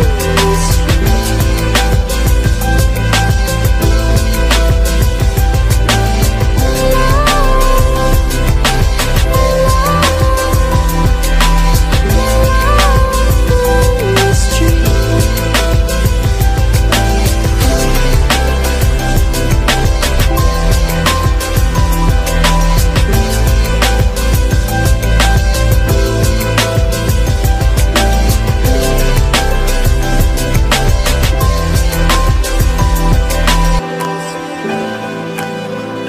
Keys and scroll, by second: 20.6 ctrl+d.